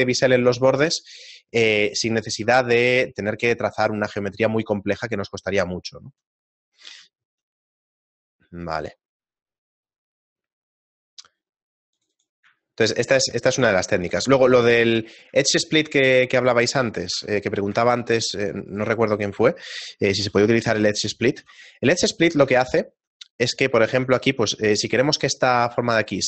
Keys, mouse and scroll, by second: 2.5 Tab, 5.7 shift+middle click, 6.3 middle click, 7.1 scroll down 2, 7.3 shift+middle click, 12.0 click, 12.1 click, 12.7 shift+middle click, 13.5 Tab, 14.1 scroll down 2, 15.5 shift+middle click, 15.5 scroll down 1, 16.9 right click, 17.2 Tab, 17.4 middle click, 17.8 ctrl+Tab, 18.7 right click, 18.9 shift+right click, 19.2 right click, 20.3 i, 21.4 e, 22.3 Tab, 22.8 shift+middle click, 23.3 middle click, 23.9 Tab, 24.9 middle click, 25.6-26.1 scroll up 4, 26.1 ctrl+Tab.